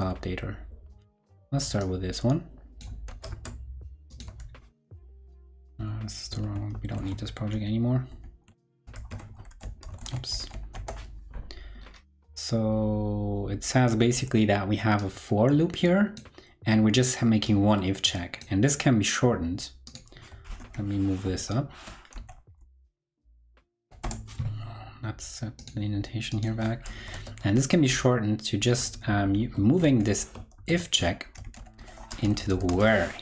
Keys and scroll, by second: 3.0 super+c, 3.2 super+Tab, 5.7 super+w, 6.2 super+w, 7.4 ctrl+Right, 8.0 super+w, 8.0 ctrl+Right, 8.6 shift+super+w, 8.6 ctrl+Right, 8.9 shift+super+f, 9.4 super+v, 9.9 shift+super+o, 10.3 super+v, 20.5 super+Right, 21.2 alt+super+[, 26.9 super+Left, 29.6 shift+super+Right, 30.5 super+x, 31.4 super+Right, 32.9 super+v.